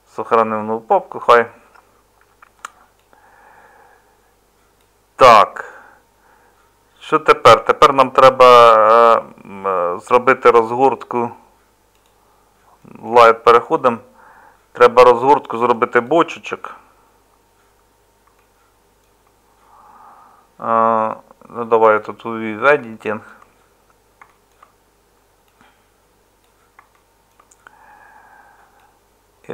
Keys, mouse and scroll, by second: 16.5 Tab.